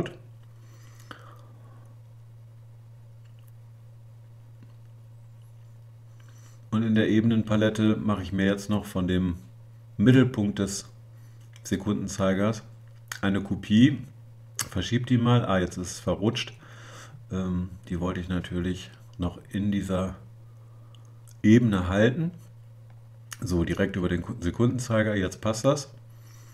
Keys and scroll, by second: 9.4 super+j.